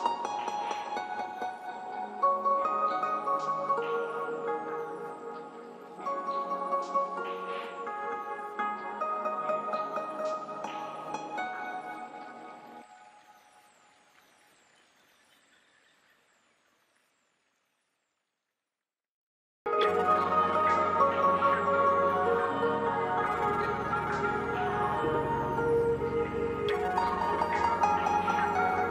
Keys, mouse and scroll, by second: 13.2 right click, 27.3 click, 28.7 click.